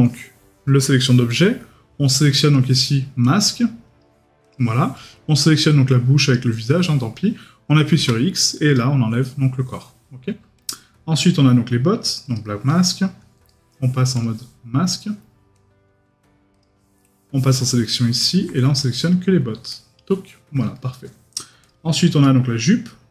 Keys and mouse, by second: 11.2 right click, 13.5 right click, 17.8 middle click, 20.7 middle click, 22.2 right click.